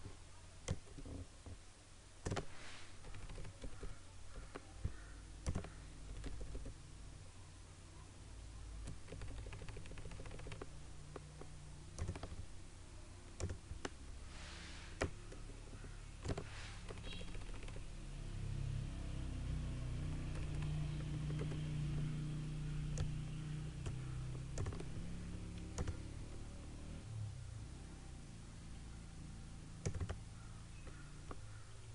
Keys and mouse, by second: 0.7-3.0 drag, 3.0 Left, 3.6 Down, 5.6 click, 6.1 Down, 9.2 Left, 12.1-17.0 drag, 17.0 Left, 23.1-24.7 drag, 24.7 typing, 29.9 click, 29.9 typing.